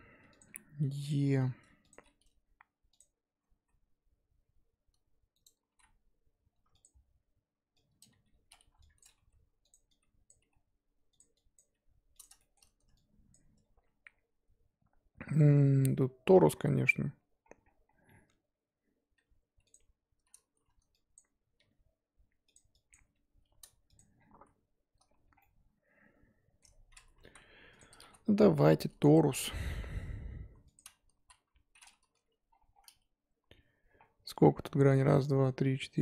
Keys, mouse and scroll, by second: 0.0-1.9 typing, 3.5 s, 5.6 s, 8.0 click, 8.1 g, 8.6 1, 9.0 click, 9.2 g, 10.3 click, 10.4 g, 11.5 click, 11.7 g, 12.4 shift+middle click, 13.3 click, 13.6 scroll up 3, 14.0-17.6 scroll down 2, 17.6 scroll down 3, 17.8 scroll up 2, 19.1 e, 21.1 click, 21.2-21.6 scroll up 3, 21.6 g, 22.9 click, 23.0 g, 24.1 scroll down 1, 24.3 z, 25.1 Tab, 25.4-27.2 middle drag, 27.2 KP_1, 27.8 click, 28.0 shift+a, 31.2 z, 31.8-32.4 scroll down 4, 32.4-32.9 scroll down 6, 33.0-34.0 scroll up 1, 34.0-34.7 scroll up 10.